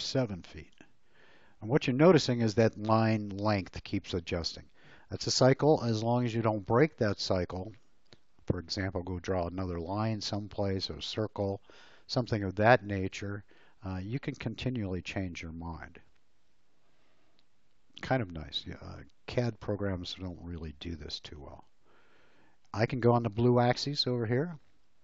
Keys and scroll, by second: 0.0 7, 0.7 Return.